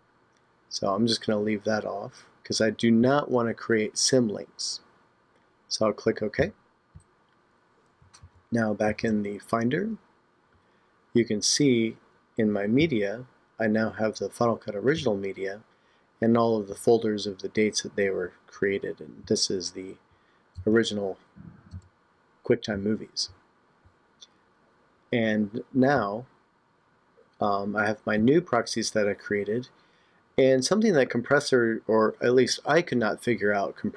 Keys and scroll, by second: 8.2 super+Tab.